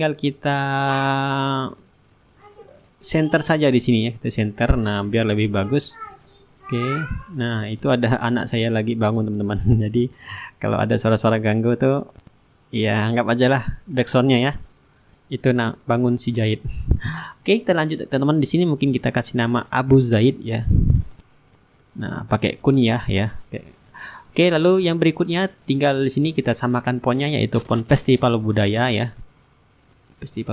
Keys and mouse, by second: 0.4-1.6 right drag, 2.6-8.1 drag, 8.3-11.1 ctrl+drag, 10.0-11.1 right drag, 11.5-13.3 shift+right drag, 12.1-13.3 drag, 13.5-14.7 middle drag, 16.3 click, 18.8-21.1 typing, 21.4 ctrl+a, 22.5 click, 24.5 f, 25.8 e, 26.1 s, 26.9 click, 30.4 click.